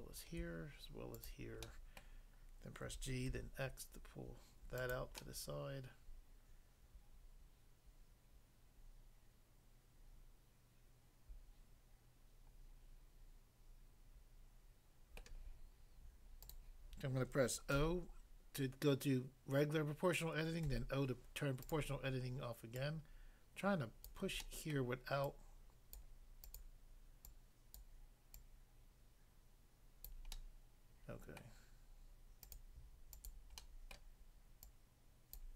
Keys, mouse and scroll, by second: 1.1 shift+click, 1.2 shift+click, 1.7 middle click, 2.1 middle click, 2.9-3.3 typing, 4.8 click, 5.1 middle click, 15.2 middle click, 16.5 click, 17.7 o, 20.6 o, 21.7 click, 21.8 click, 22.8 click, 24.1 click, 24.4 middle click, 24.8 middle click, 25.9 click, 26.5 click, 26.6 click, 27.2 click, 27.8 click, 28.3 click, 30.1 click, 30.3 middle click, 31.4 middle click, 32.5 click, 32.6 click, 33.1 shift+click, 33.6 middle click, 33.9 middle click, 34.6 shift+click, 35.3 click.